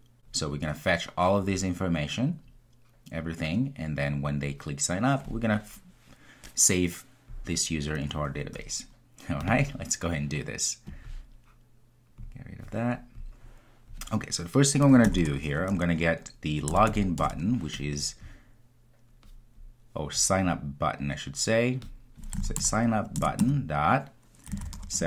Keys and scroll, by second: 23.2 Return.